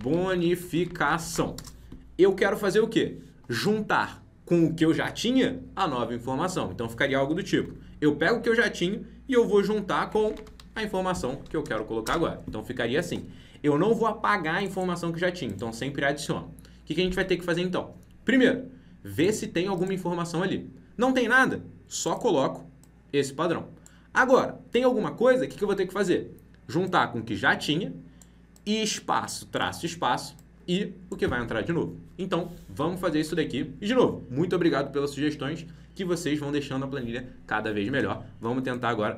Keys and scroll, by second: 7.5 F2, 10.6 ctrl+v.